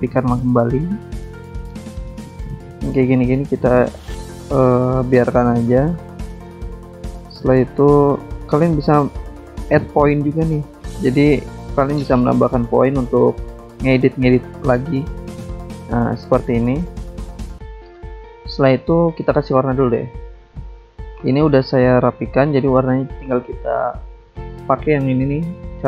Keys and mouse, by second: 0.0 ctrl+z, 1.0 click, 1.7 click, 5.6 right click, 6.5 click, 7.6 ctrl+z, 9.6 click, 11.6 right click, 13.1 click, 14.0 click, 15.4 click, 16.9 click, 19.7 click, 20.4 click, 21.6 click, 22.9 click, 24.6 click.